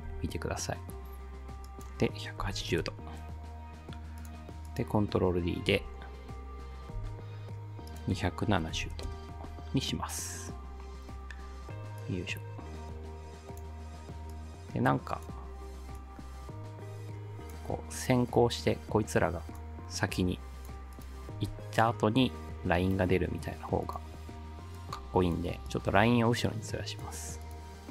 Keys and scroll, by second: 0.1 r, 2.2-3.1 typing, 5.7 ctrl+d, 7.0 r, 8.3-9.3 typing.